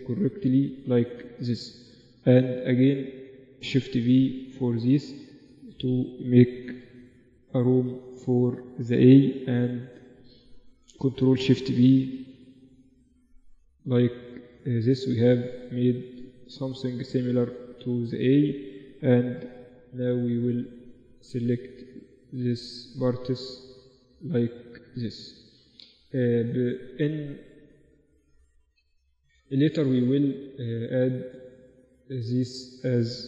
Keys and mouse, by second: 1.3 middle click, 1.5-3.3 right drag, 2.6 g, 3.5-5.4 right drag, 4.3 shift+v, 6.3-8.1 right drag, 7.1 shift+v, 8.6-10.8 right drag, 9.7 g, 12.2 ctrl+shift+b, 18.7-20.9 right drag, 20.1 g, 21.1 right click, 21.9 g, 22.6-25.8 right drag, 23.1 g, 24.3 g, 25.8 Tab, 27.1 Tab, 30.0-31.3 middle drag, 31.3-33.2 middle drag.